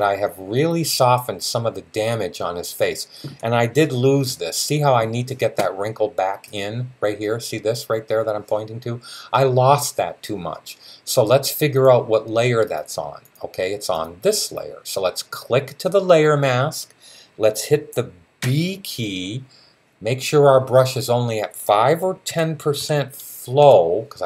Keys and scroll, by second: 18.2 b, 22.1-22.5 typing.